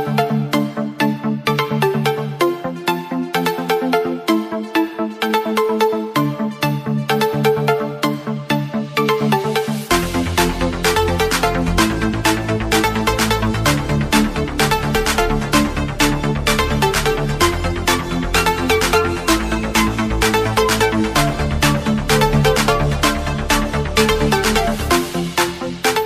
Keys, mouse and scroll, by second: 8.7 click, 9.4 click, 12.8 Return, 13.1 Down, 15.0 scroll up 1, 15.5 click, 16.1 scroll up 1, 16.6 click, 20.3 click.